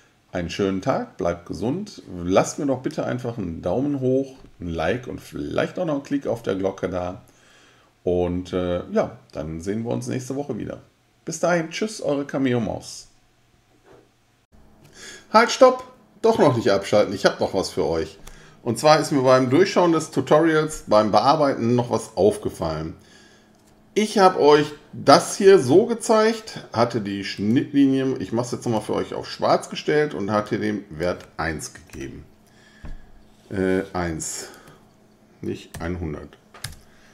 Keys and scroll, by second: 31.9 1, 35.7 ,, 36.6 Return.